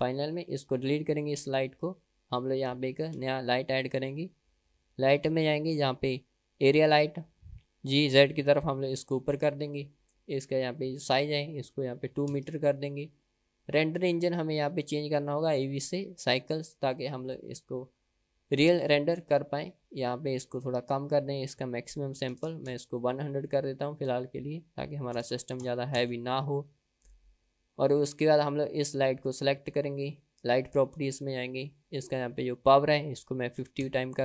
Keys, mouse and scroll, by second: 0.2 click, 1.8 Delete, 2.9 click, 3.2 shift+a, 8.4 g, 11.3-13.2 drag, 14.7 click, 15.7-18.2 drag, 20.4 click, 21.5-24.0 drag, 22.9 KP_0, 24.5-26.9 drag, 26.2 KP_0, 27.6-28.1 scroll down 1, 29.2 click, 30.8 click, 32.6-34.2 drag.